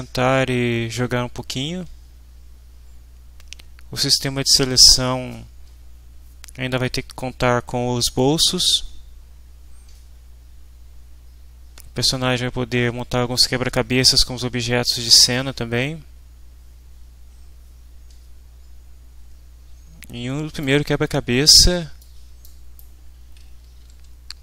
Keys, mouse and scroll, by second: 20.5 click, 22.0 click, 22.8-24.4 right drag, 24.0 w.